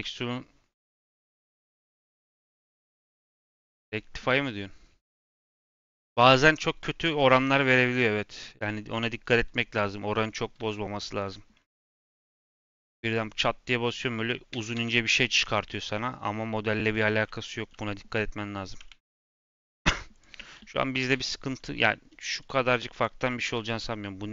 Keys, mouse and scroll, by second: 2.2-5.2 drag, 9.6 click, 10.2 scroll down 1, 10.5 n, 10.9 middle drag, 11.2-11.5 scroll up 1, 11.5-11.8 middle drag, 11.8-13.9 scroll up 1, 13.9 middle click, 14.4 s, 18.8 ctrl+z, 19.3 click, 20.1 click, 21.0 l, 22.3 click, 22.8 click, 23.4 l, 23.7 middle click.